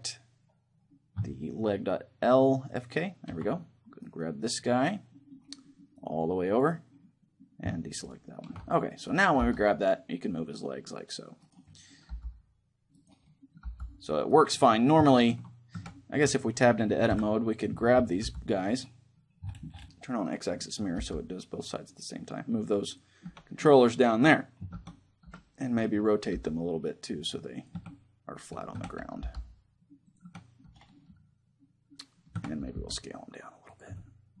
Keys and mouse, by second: 2.4-3.8 drag, 3.8 middle click, 4.2-5.6 right drag, 5.6 middle click, 5.9-8.8 drag, 9.2 g, 9.6 right click, 11.2-15.9 right drag, 11.4-16.8 middle drag, 11.8 g, 13.4 g, 15.5 Tab, 16.8 KP_3, 17.9 g, 18.5-20.4 right drag, 20.0-22.6 drag, 20.7 g, 22.7-24.5 drag, 23.0 Tab, 24.5 Tab, 24.5-25.6 middle drag, 25.0 KP_3, 26.0 r, 27.4-29.8 drag, 27.5 Tab, 28.5 Tab, 28.9 g, 29.8-31.8 drag, 30.0 Tab, 31.8-33.4 middle drag, 32.1 Tab, 32.4 s, 33.5-34.4 drag, 33.6 Tab.